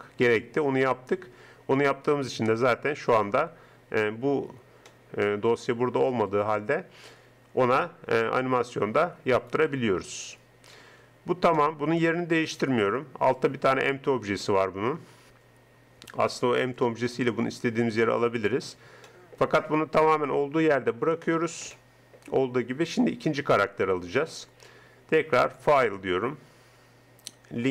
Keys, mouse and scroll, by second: 2.2-3.4 right drag, 3.4 r, 6.5 click, 8.0 g, 9.4 right click, 10.0 g, 13.8-15.4 middle drag, 16.8 click, 17.7 middle click, 18.7 middle click, 24.7 middle click, 25.4-27.2 drag, 27.2 middle click.